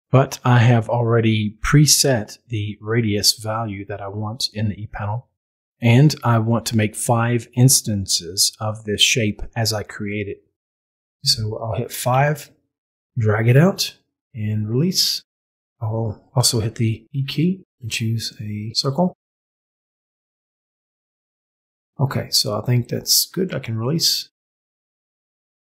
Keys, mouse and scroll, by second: 0.3-10.8 drag, 10.8 5, 17.6 e, 18.3 click, 19.5-23.6 drag.